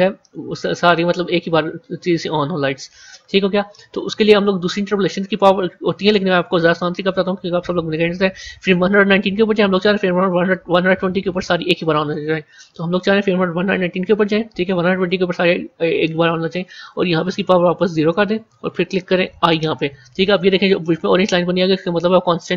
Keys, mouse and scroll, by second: 9.7-12.5 drag, 14.5-19.3 drag, 19.3 typing, 21.3-22.5 drag.